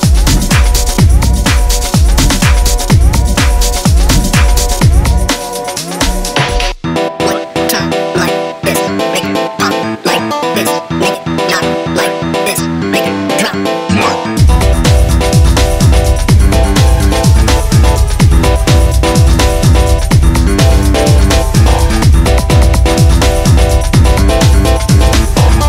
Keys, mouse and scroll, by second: 0.4 h, 0.7 scroll up 2, 0.9 click, 1.3 click, 2.2 e, 3.1 e, 4.4 ctrl+r, 5.0 click, 5.3 ctrl+r, 5.9 click, 6.1 click, 6.6-7.6 scroll down 11, 6.7 click, 7.6-8.7 scroll up 15, 8.2 click, 8.7 click, 9.0 click, 9.2-9.5 scroll down 2, 9.5 scroll up 2, 9.6 g, 11.3 click, 11.4 scroll down 4, 11.6-13.0 scroll up 4, 11.7 click, 13.7 scroll down 1, 13.8 scroll up 2, 14.0 scroll down 1, 14.1 click, 14.7 click, 15.2 scroll up 1, 15.3 click, 15.5-15.8 scroll down 1, 15.8 KP_0, 16.0 KP_7, 16.5 scroll up 3, 17.0 scroll down 2, 17.1 click, 17.4 click, 17.6 scroll up 2, 17.8 click, 18.0 click, 18.4 g, 19.2 s, 19.7 scroll down 3, 19.9 scroll up 1, 20.2 click, 20.6 click, 20.8 scroll up 1, 20.9 click, 21.1 scroll down 2, 21.2 g, 23.1 click, 23.3 scroll down 3, 23.4 scroll up 3, 23.6 z, 24.2-24.7 scroll down 4, 24.3 z, 24.7 scroll up 1, 24.9 click, 25.2 click, 25.3 scroll down 2, 25.5 KP_0, 25.6 middle click.